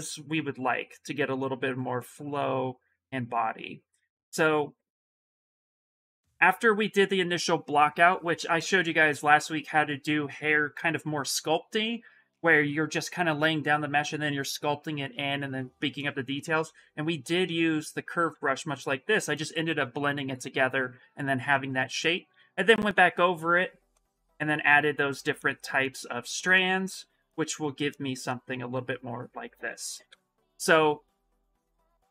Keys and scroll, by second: 29.4 shift+f, 29.8 shift+f, 31.6 s.